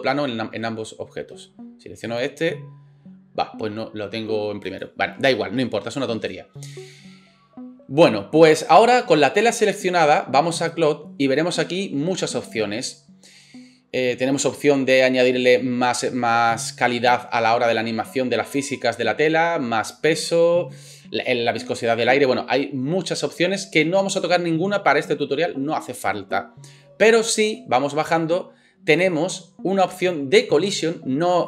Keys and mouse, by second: 2.0 middle click, 2.0 right click, 4.7 middle click, 4.7 right click.